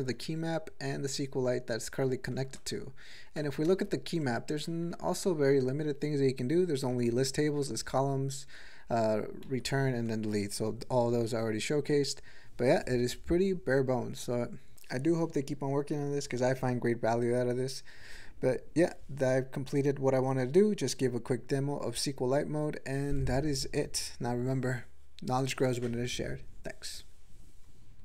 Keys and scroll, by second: 0.2 ctrl+n, 2.1 ctrl+p, 2.6 Return, 3.4 alt+m, 3.7 ctrl+space, 4.2 ctrl+e, 4.6 ctrl+n, 4.8 ctrl+n, 5.0 ctrl+n, 5.2 ctrl+n, 6.8 ctrl+p, 7.0 ctrl+p, 7.1 ctrl+p, 7.4 ctrl+n, 7.7 ctrl+n, 8.4 ctrl+n, 9.4 ctrl+g.